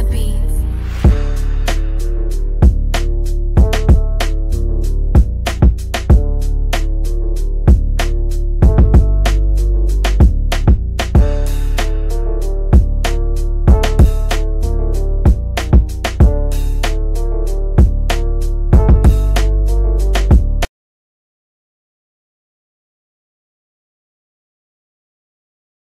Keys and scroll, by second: 7.9 ctrl+k, 17.2 F3, 17.5 Escape, 22.8 F9.